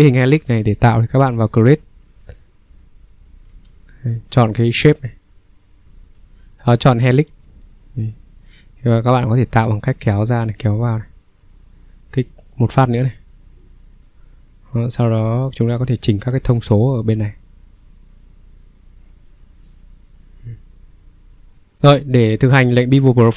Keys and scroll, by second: 0.0 Escape, 3.5 ctrl+3, 5.8 Escape, 21.7 Delete.